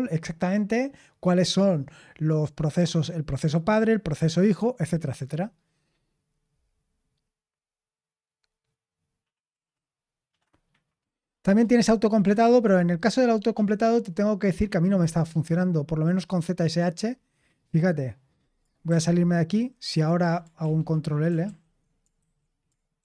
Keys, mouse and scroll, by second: 17.0-18.4 scroll down 1, 18.4-18.8 scroll down 1, 18.8 click, 18.8 q, 20.5 ctrl+l, 21.4 ctrl+l, 22.1 super+h, 22.9 ctrl+l.